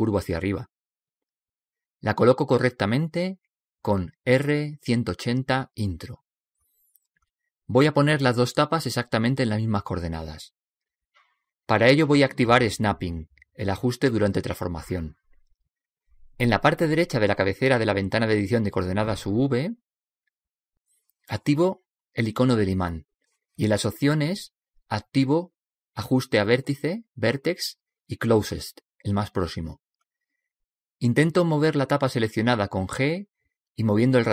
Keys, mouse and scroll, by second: 0.7 right click, 4.6 r, 17.5-20.7 middle drag, 23.3-26.4 drag, 26.6 click, 32.3 g.